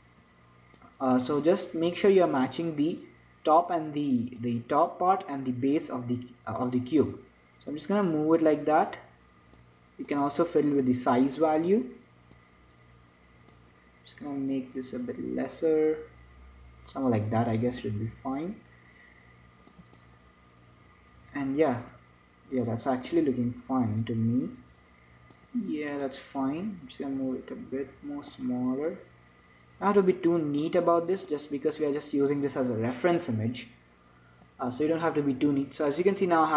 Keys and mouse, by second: 1.5-3.5 drag, 7.0-12.5 drag, 12.7-16.6 drag, 18.1-20.1 drag, 20.3-22.0 drag, 23.4-25.1 drag, 26.4-28.0 drag, 29.2-31.0 drag, 31.6-33.4 drag, 34.8 Tab, 35.2 Tab.